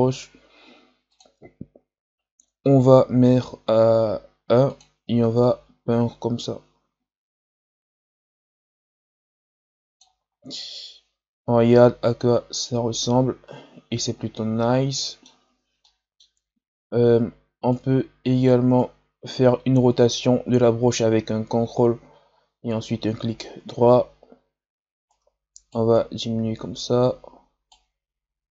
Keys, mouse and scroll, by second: 2.3 shift+f, 5.4-8.3 drag, 10.7-13.7 middle drag, 15.7 middle click, 16.4-17.6 scroll down 2, 17.6-21.7 right drag, 24.3-24.9 scroll down 1, 24.9 scroll down 1, 25.0-28.5 shift+right drag.